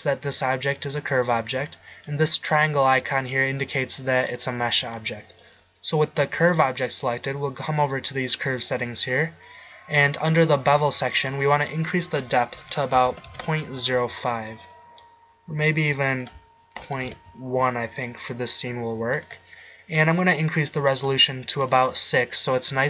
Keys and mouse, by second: 2.0-3.9 drag, 4.9-9.0 drag, 15.0-16.3 middle drag, 18.2 middle click, 20.6-21.9 drag.